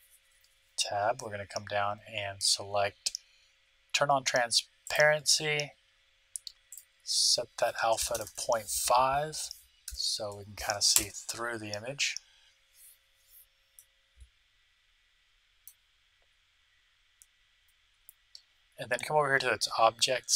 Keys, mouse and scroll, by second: 1.4-4.6 middle drag, 1.4-2.7 scroll down 1, 2.7-3.7 scroll down 1, 3.7 scroll down 1, 3.9-4.6 scroll up 1, 4.8-6.5 drag, 6.7-8.3 drag, 8.1 BackSpace, 8.2 BackSpace, 13.7-15.6 middle drag, 16.2-19.8 scroll up 1, 19.8 scroll up 1.